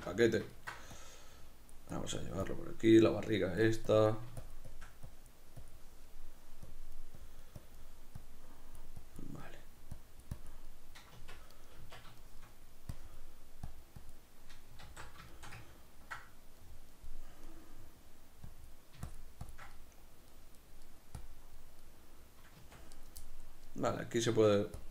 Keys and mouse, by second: 0.5 ctrl+middle click, 0.9 click, 9.4 middle click, 9.9 click, 10.6 middle click, 11.1 b, 11.2 Tab, 11.5 right click, 11.8 Tab, 11.9 b, 12.2 shift+middle click, 12.9 click, 14.8 q, 15.3-18.4 ctrl+shift+middle drag, 18.4 click, 19.7-21.2 middle drag, 21.2 click, 21.8-22.9 middle drag, 22.6 b, 22.7 Tab, 22.9-24.3 right drag, 24.3 Tab, 24.3-24.9 middle drag.